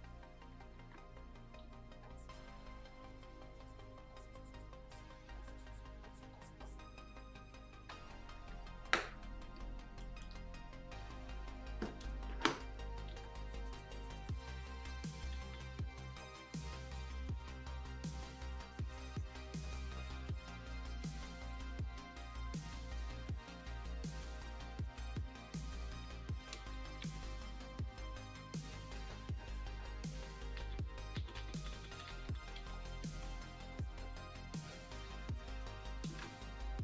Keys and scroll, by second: 0.7 ctrl+z, 1.6 x, 5.2 x, 9.9 space, 13.1 x, 15.3 ctrl+z, 26.6 ], 26.9 ], 30.5 ctrl+z, 31.1 ctrl+z, 31.3 ctrl+z, 31.5 ctrl+z, 31.7 ctrl+z, 31.9 ctrl+z, 32.0 ctrl+z, 32.2 ctrl+z, 32.5 x, 36.1 ctrl+z.